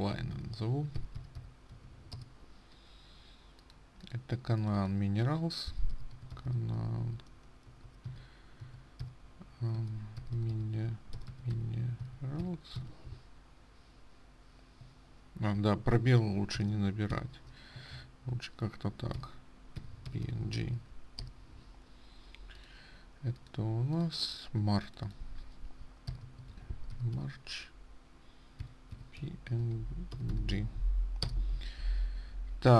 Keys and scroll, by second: 31.4 BackSpace, 31.7 Return.